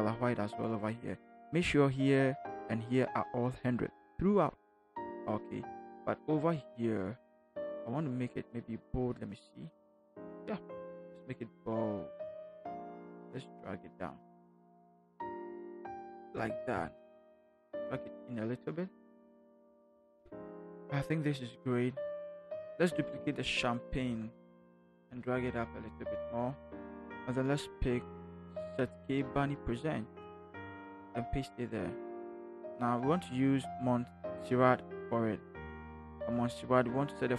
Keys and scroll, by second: 11.1 v, 16.2 shift+Up, 16.9 shift+Up, 17.2 shift+Right, 17.9 shift+Right, 23.9 ctrl+j, 29.2 ctrl+c, 31.0 ctrl+v.